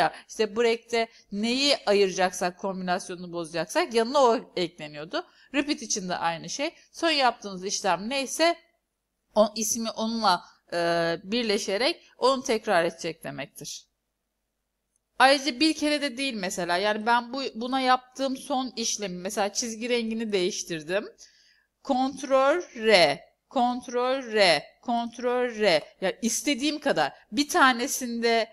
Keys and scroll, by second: 22.8 ctrl+r, 24.3 ctrl+r.